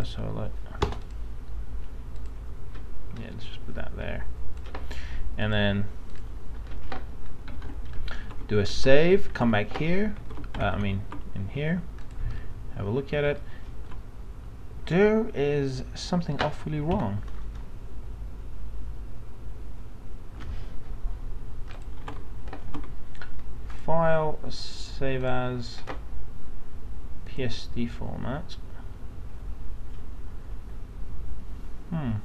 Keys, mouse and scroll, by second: 0.8 Return, 7.5 ctrl+s, 8.2 alt+Tab, 8.8 alt+Tab, 9.4 alt+Tab, 10.4 alt+Tab, 10.8 alt+Tab, 12.0 click, 12.4 middle click, 17.0 F9, 21.7 click, 22.0 alt+Tab, 22.7 alt+Tab, 23.7-32.2 drag.